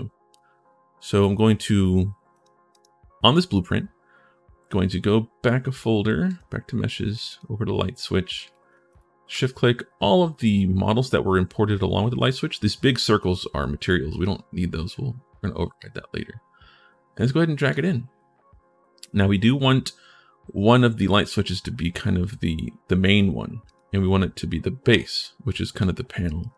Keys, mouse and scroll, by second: 6.0 click, 6.9 click, 7.0 click, 8.2 click, 8.7 shift+click, 15.6-17.5 drag, 23.4 right click, 25.5 right click, 26.2 right click, 26.2 w.